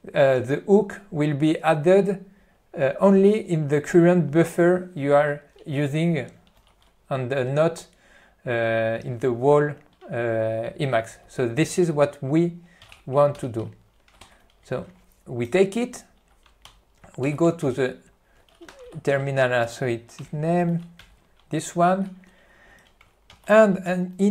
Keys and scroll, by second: 6.7 ctrl+g, 11.4 Left, 13.1 a, 13.5 q, 14.4 ctrl+n, 14.8 alt+w, 16.8 Left, 17.7 Right, 18.0 ctrl+e, 21.1 Return, 23.4 alt+:.